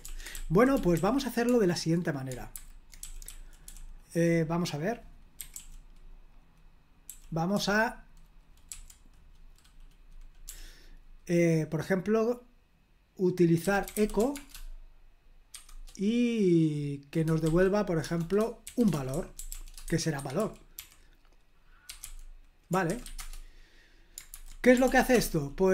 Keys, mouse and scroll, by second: 0.0 super+l, 0.3-0.9 typing, 2.5 super+h, 3.0-3.6 typing, 5.1-7.5 typing, 8.6 typing, 10.4 typing, 13.3-15.5 typing, 17.4-23.5 typing, 24.3 super+h, 24.8 ctrl+p, 25.1 Return.